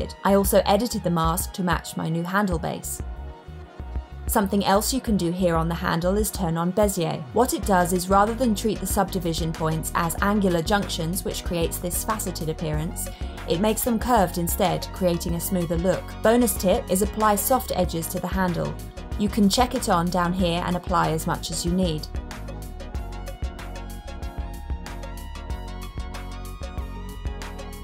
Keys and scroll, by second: 3.3 super+z.